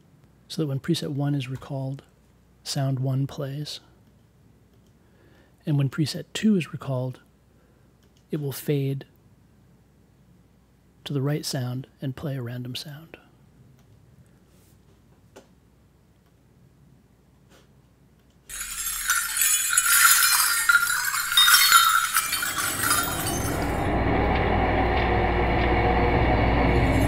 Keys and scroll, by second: 1.5 m, 2.0 1.